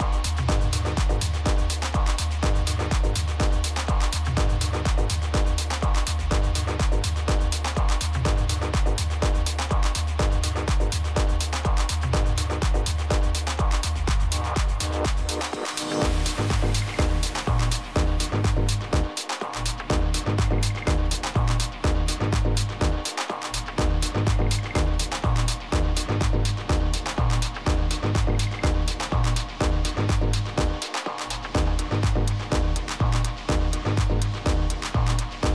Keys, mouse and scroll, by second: 7.9-9.8 middle drag, 11.2 KP_1, 12.3 middle click, 12.9 z, 13.5 z, 17.8-19.7 drag, 20.3-22.3 middle drag, 21.2 a, 21.6 a, 22.6 a, 31.1 a, 33.1-35.5 right drag, 33.9 a, 34.9 middle click.